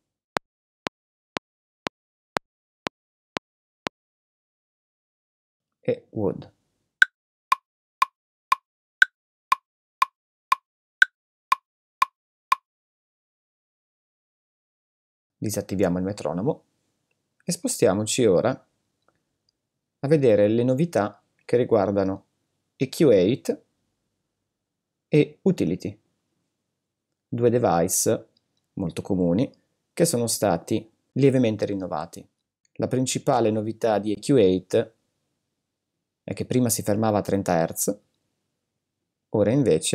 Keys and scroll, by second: 0.3 space, 4.0 space, 7.0 space, 13.0 space.